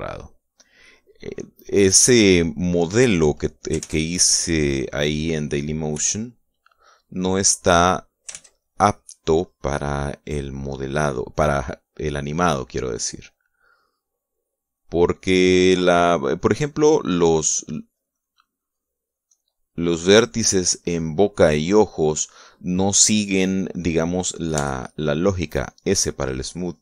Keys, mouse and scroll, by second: 0.0-1.2 drag, 1.3 middle click, 2.5-3.8 drag, 4.6 ctrl+z, 6.7 f, 7.2 click, 7.8 click, 9.0 ctrl+z, 10.4-11.4 drag, 11.5 click, 12.2 click, 12.9 click, 14.0 click, 15.4 click, 15.8-20.5 drag, 20.7 middle click, 21.8 middle click, 22.6 middle click, 25.3 s, 26.4-26.8 drag.